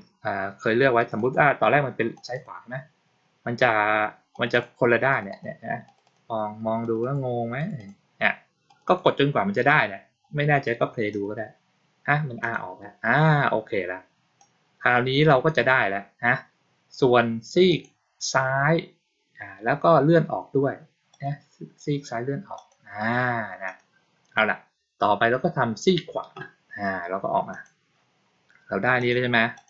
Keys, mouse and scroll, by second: 0.9 click, 1.0 click, 2.0 click, 2.2 click, 4.2 click, 4.4 click, 5.0 click, 5.2 click, 5.7 click, 5.9 click, 6.7 click, 6.9 click, 7.4 click, 7.6 click, 8.5 click, 8.7 click, 11.0 click, 12.3 click, 14.2-15.3 drag, 17.6 click, 21.0 click, 22.4 click, 23.5 click, 27.4 click, 28.9 click, 29.4 click.